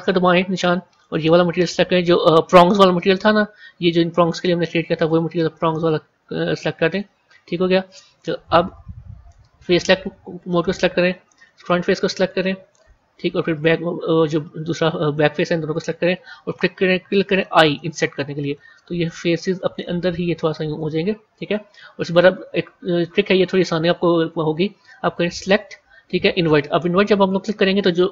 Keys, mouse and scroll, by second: 9.8 click, 10.9 click, 11.5-13.4 middle drag, 13.4 shift+click, 14.2-17.2 middle drag, 25.0-28.1 drag.